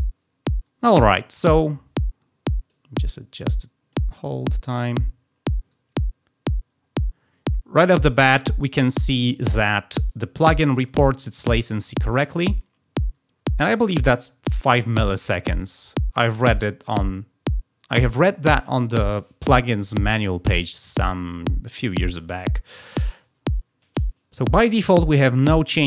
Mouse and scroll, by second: 2.6-3.8 drag, 4.1 scroll up 1, 10.3 click.